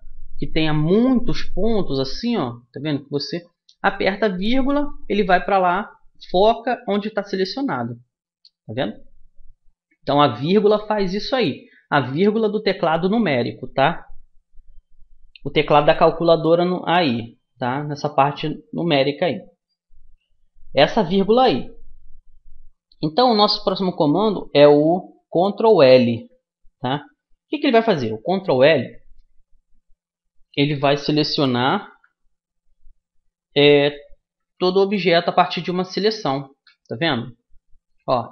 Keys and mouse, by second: 1.7-3.5 middle drag, 4.3 KP_Decimal, 7.3 middle click, 7.5-10.1 middle drag, 28.3-30.1 middle drag, 35.5 ctrl+l.